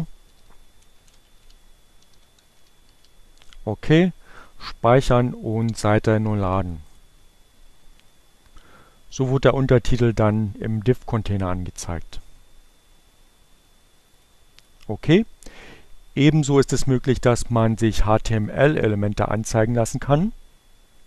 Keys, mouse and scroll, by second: 1.1 click, 1.5 Return, 1.9 space, 3.2-6.4 typing, 7.6 click, 9.0 click, 10.8 click, 19.3 click, 20.3 click.